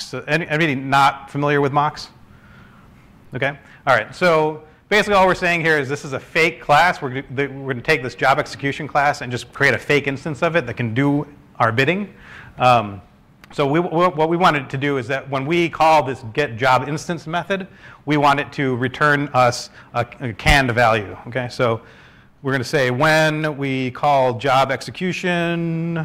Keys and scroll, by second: 1.4-3.1 typing, 19.6-19.9 typing, 20.8 ctrl+space, 24.6 BackSpace.